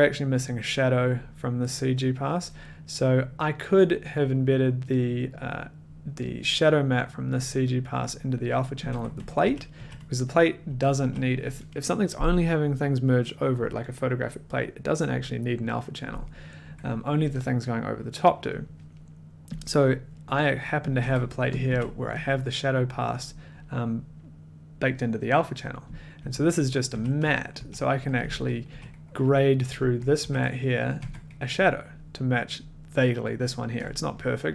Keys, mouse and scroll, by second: 8.8 click, 8.9-11.4 typing, 10.4 click, 10.5 middle click, 19.8-20.9 drag, 21.0 1, 21.6 click, 21.7 a, 22.2 click, 22.3 middle click, 25.6 middle click, 26.2-28.6 typing, 29.7 a, 30.9 click, 31.0 1, 34.3 middle click.